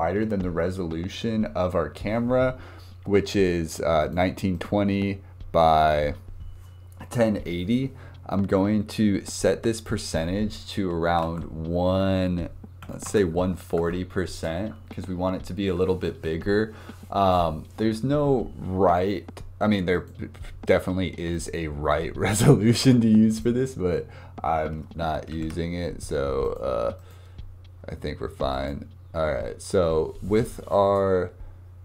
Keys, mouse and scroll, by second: 4.0 click, 5.7-6.9 drag, 9.8-12.8 drag, 19.9 click, 21.3-25.3 right drag, 25.3 ctrl+z, 26.4-26.9 drag, 27.0 click, 28.5 click, 31.0 scroll up 2.